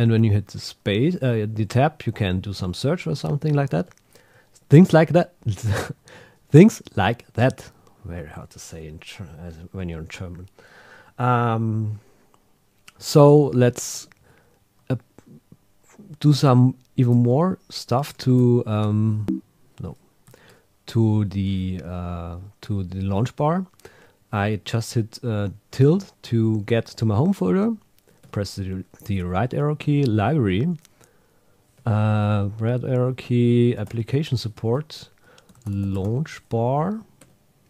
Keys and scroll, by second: 20.3 shift+`, 28.2 Right, 31.8 Right, 34.7 Right.